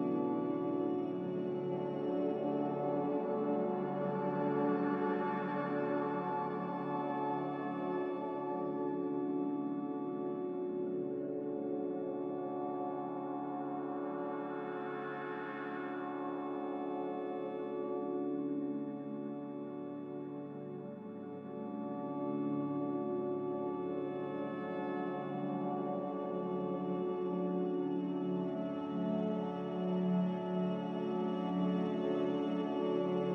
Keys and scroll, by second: 0.1 z, 5.6 3, 9.4 z, 15.8 a, 25.0 q, 31.7 q.